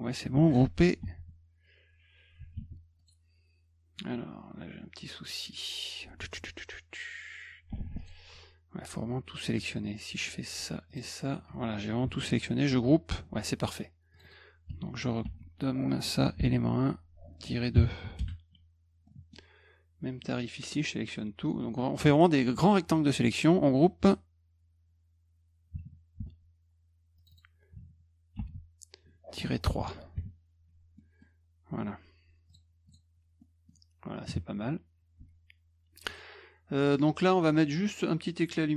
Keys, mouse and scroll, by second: 1.0 ctrl+g, 2.5 ctrl+z, 3.0 click, 4.0-5.3 drag, 8.0 shift+click, 10.9 shift+click, 12.7 ctrl+g, 14.1 click, 14.2 click, 15.2 ctrl+v, 16.4 BackSpace, 18.2 Return, 19.1 middle click, 20.2-21.5 drag, 26.2 ctrl+g, 27.2 click, 27.3 click, 28.4 ctrl+v, 29.6 BackSpace, 31.0 middle click, 32.5 click, 32.9 click, 33.4 middle click, 36.1 click.